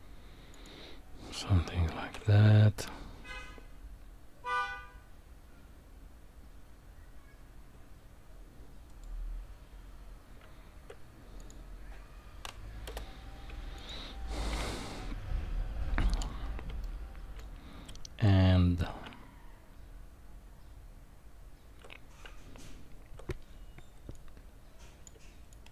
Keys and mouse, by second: 2.0 ctrl+r, 10.4 Tab, 12.9 Delete, 13.8 click, 16.8-17.4 shift+middle drag, 19.0 Tab, 22.3 Tab, 24.2 click, 25.6 shift+click.